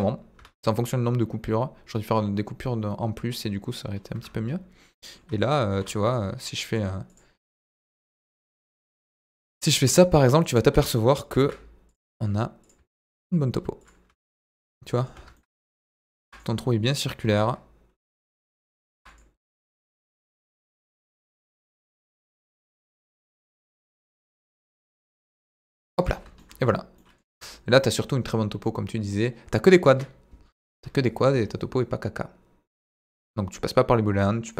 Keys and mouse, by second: 0.3 Tab, 4.1 Tab, 4.8 middle click, 5.7 ctrl+3, 6.6 right click, 7.4 middle click, 7.6 Tab, 7.8 a, 8.2 middle click, 8.7 e, 9.5 click, 9.8 middle click, 11.3 ctrl+r, 12.6 click, 12.9 ctrl+r, 13.7 click, 14.0 Tab, 14.2 middle click, 15.1 Tab, 15.3 middle click, 16.2 ctrl+r, 16.8 click, 17.1 ctrl+r, 18.2 click, 18.4 middle click, 18.9 ctrl+r, 19.7 click, 20.3 ctrl+r, 21.3 click, 21.6 ctrl+r, 23.3 click, 24.1 ctrl+r, 25.3 click, 25.5 Tab, 25.6-26.0 middle drag, 26.4 middle drag, 26.9-27.2 middle drag, 27.3 Tab, 27.4 middle click, 28.2-29.2 middle drag, 29.8 KP_7, 30.7 Tab.